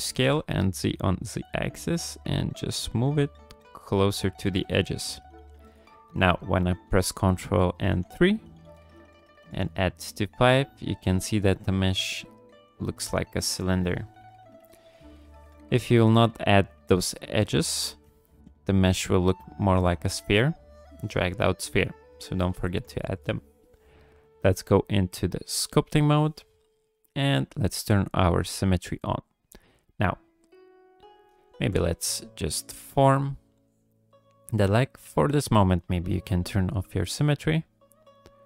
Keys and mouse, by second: 4.6 Tab, 7.9 ctrl+3, 9.5 click, 10.5 click, 12.2 click, 12.2 middle click, 13.4 middle drag, 14.3 KP_1, 18.2 shift+middle drag, 24.8-25.8 drag, 27.9 click, 29.7-31.1 drag, 31.6 g, 31.8 f, 32.6 click, 33.6 click, 35.6 click, 37.1 click.